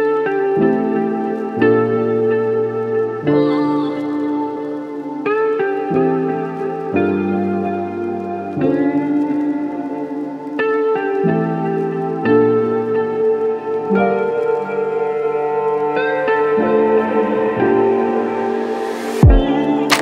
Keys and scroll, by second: 14.2 ctrl+c, 15.6 ctrl+v, 18.6-19.6 typing.